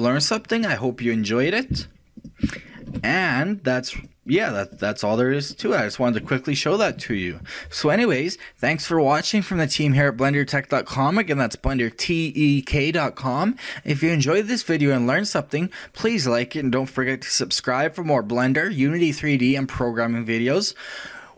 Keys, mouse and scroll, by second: 1.7 z, 2.7-4.1 middle drag, 4.1 click, 5.4 shift+click.